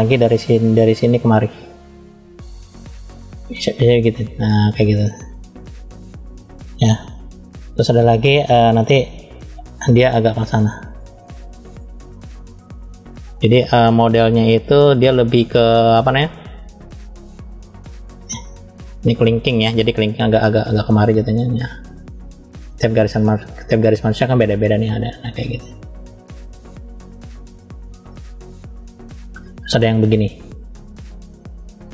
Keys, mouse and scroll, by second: 1.5 click, 3.5-5.0 drag, 20.7 click, 22.1 click, 23.3 click, 25.2 click, 26.7 click, 30.2 click, 31.3 click.